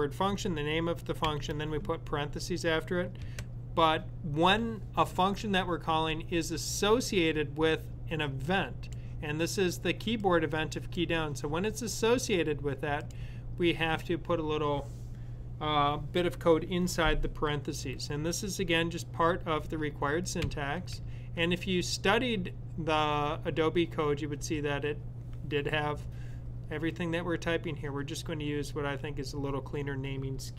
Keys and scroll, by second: 5.7 typing, 22.8-23.6 typing.